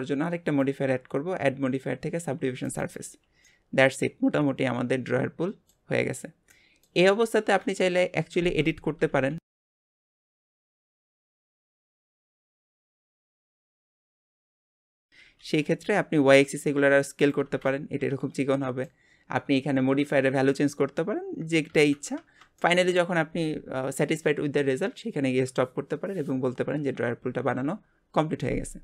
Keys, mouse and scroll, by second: 0.4-3.5 drag, 3.5-6.5 middle drag, 6.7-7.8 middle drag, 7.8 KP_7, 8.4 Tab, 9.1 alt+z, 10.4 click, 11.2 alt+a, 11.7 b, 12.9 b, 15.2 s, 17.5 alt+z, 17.7-20.8 middle drag, 21.7 ctrl+z, 22.2 Tab, 22.6-25.8 middle drag.